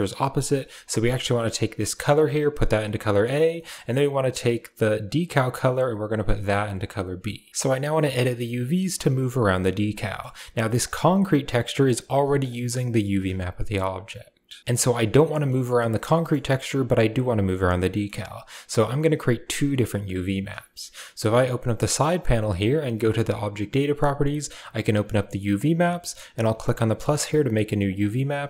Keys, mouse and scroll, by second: 0.1 drag, 2.0-3.2 drag, 3.4 middle click, 3.9 click, 5.1-6.9 drag, 7.5 g, 7.9-8.3 middle drag, 9.9 middle click, 10.6 click, 11.5 middle click, 12.2 click, 12.4 g, 13.6 click, 15.3 middle click, 16.0 middle click, 17.8 middle click, 18.2 click, 21.1 click, 22.9 drag, 24.6 click, 26.5 click, 27.7 click.